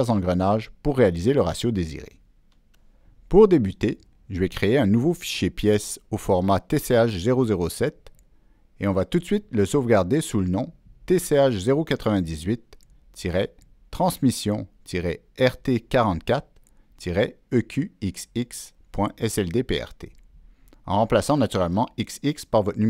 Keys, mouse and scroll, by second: 4.5 ctrl+n, 6.9 Return, 10.8 ctrl+Return, 10.9 ctrl+s, 13.1 ctrl+v, 15.2 ctrl+v, 17.3 ctrl+v, 19.0 click.